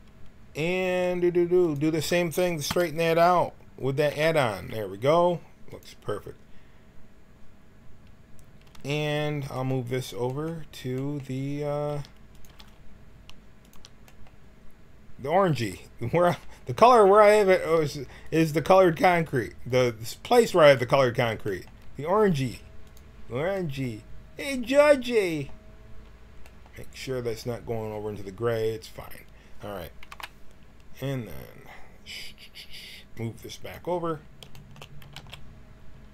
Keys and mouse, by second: 1.5-2.6 drag, 2.6 l, 4.0 alt+e, 11.8 g, 12.4 g, 17.5 g, 20.7-22.3 drag, 22.3 s, 25.8-27.7 drag, 29.2 middle click, 30.0 KP_1, 33.1 click, 33.6 right click, 33.8 click, 34.2 middle click, 34.6 click, 34.9 g.